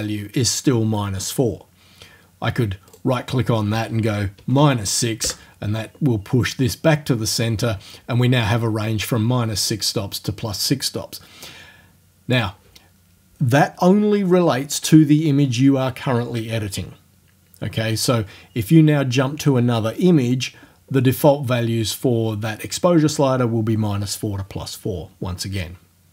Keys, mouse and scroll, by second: 3.0 right click, 4.4 KP_Subtract, 4.6 KP_6, 5.4 KP_Enter, 9.1-12.6 drag.